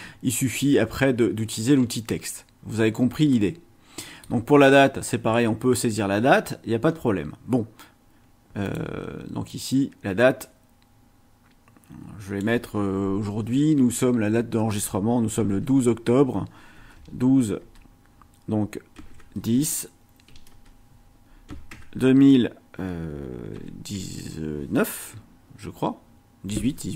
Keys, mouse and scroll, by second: 1.7-2.4 scroll down 2, 3.3-4.4 middle drag, 6.3 scroll up 1, 6.8 scroll down 1, 8.6 click, 9.5 click, 10.4-12.6 drag, 15.4 KP_1, 15.5 KP_2, 16.8 space, 16.9 KP_Divide, 17.6 space, 19.0 KP_1, 19.1 KP_0, 19.4 space, 20.3 KP_Divide, 20.5 space, 21.5 KP_2, 21.7 KP_0, 23.5 KP_1, 23.9 KP_8.